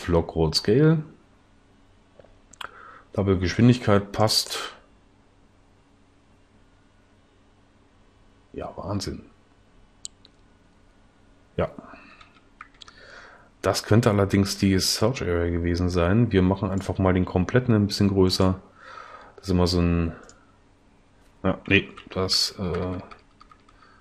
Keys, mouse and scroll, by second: 12.2 Left, 17.7 s.